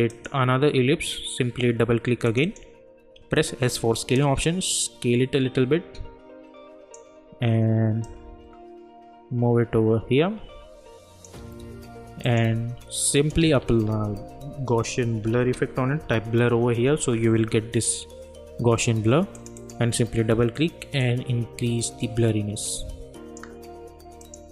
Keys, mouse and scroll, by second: 0.1 click, 2.6 click, 3.3 s, 4.1-12.2 drag, 13.4 ctrl+a, 15.0-16.7 typing, 18.0-19.3 scroll down 1, 19.3-24.2 drag, 21.3-24.2 drag.